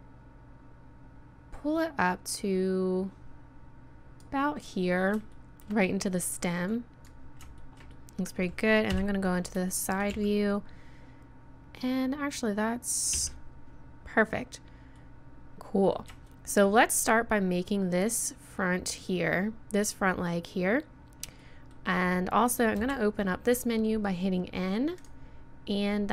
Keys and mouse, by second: 5.3 middle click, 6.7-7.7 drag, 8.0 middle click, 8.9 KP_3, 10.1 z, 13.1 z, 21.4-22.8 middle drag, 22.8 n, 24.9 middle click, 25.0-26.0 drag, 26.0 middle click.